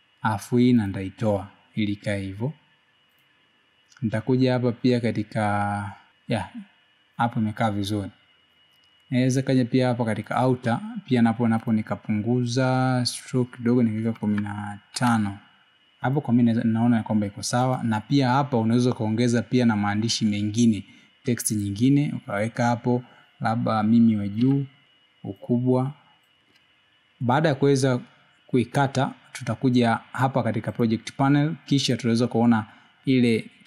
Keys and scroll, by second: 14.1 1.